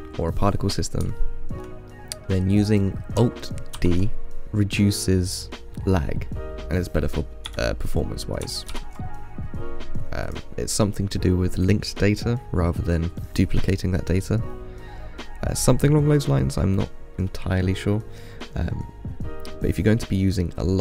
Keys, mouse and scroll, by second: 1.4-2.6 shift+middle drag, 2.6-2.9 scroll up 1, 2.9 click, 4.0 alt+d, 8.9 ctrl+z, 10.5 click.